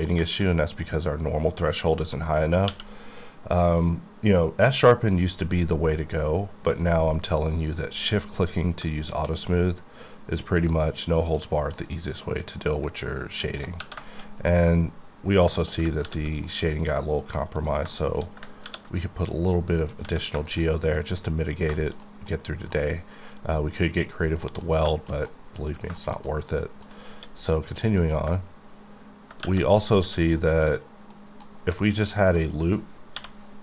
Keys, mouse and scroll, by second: 0.2 shift+middle click, 2.7 q, 8.9 shift+Num_Lock, 9.0 shift+click, 9.5-11.3 scroll down 2, 11.3-11.6 scroll down 2, 11.3 click, 11.8-13.7 middle drag, 14.1 shift+middle click, 14.3-15.6 scroll up 4, 15.6 middle click, 15.9 ctrl+middle click, 16.0 ctrl+r, 16.4 click, 17.6 click, 18.0 shift+middle click, 18.6 ctrl+r, 18.9 ctrl+click, 19.9 click, 20.3 scroll down 2, 20.5 shift+middle click, 21.5 scroll down 2, 21.7 shift+middle click, 22.3 scroll down 1, 22.4-24.1 scroll up 4, 22.7 middle click, 24.2-25.3 scroll down 5, 24.4 middle click, 24.9 shift+middle click, 25.3 middle click, 26.9 scroll up 7, 27.1 d, 27.7 click, 28.0 middle click, 30.0 1, 30.4 middle click, 31.6 middle click, 33.1 k.